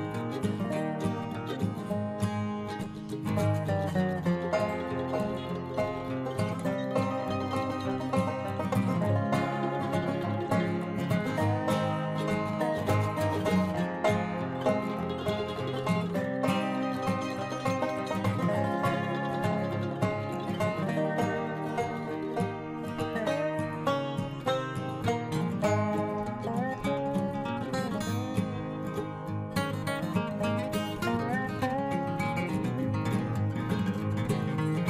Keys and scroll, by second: 14.9 ctrl+alt+shift+e.